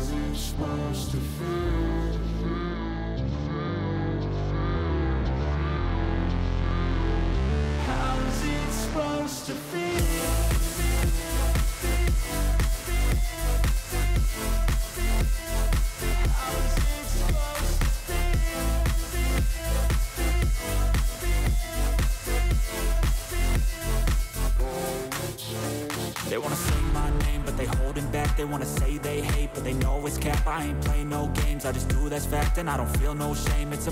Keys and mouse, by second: 2.9-4.2 drag, 5.2 alt+shift+click, 7.4-8.7 drag, 10.8 alt+click, 11.2 alt+shift+click, 12.1 alt+shift+click, 12.6 shift+click, 15.1-16.3 drag, 19.3-21.1 drag, 22.2 click, 23.5 alt+click, 24.7 alt+shift+click, 28.0-29.1 drag, 31.3-32.3 drag.